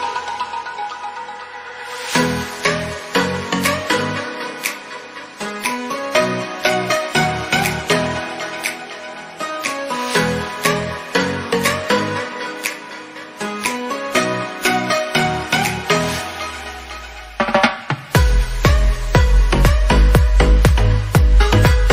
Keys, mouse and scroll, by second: 0.3 click, 0.9 click, 1.8 scroll up 2, 1.9-3.7 shift+middle drag, 3.7 KP_1, 4.1 scroll up 1, 4.3 Tab, 4.6 Tab, 4.9 click, 5.5 Tab, 5.7-7.0 middle drag, 7.1 KP_1, 7.4 a.